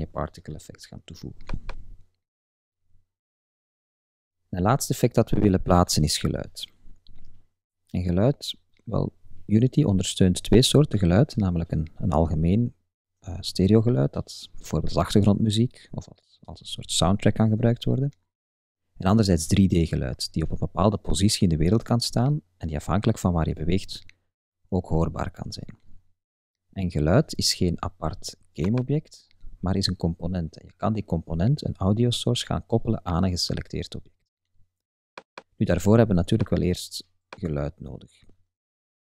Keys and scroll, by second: 38.9 super+Tab.